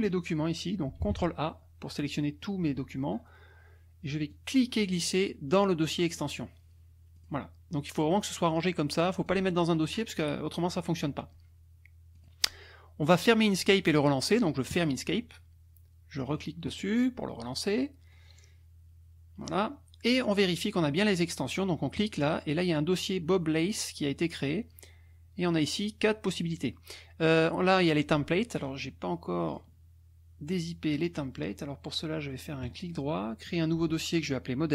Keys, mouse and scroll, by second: 1.0 ctrl+a, 4.3-6.3 drag, 7.2 click, 8.4 click, 12.1 click, 14.7 click, 16.3 click, 22.0 click, 28.6 click, 29.5 click, 30.9 click, 31.4 click, 32.6 right click, 33.5 click.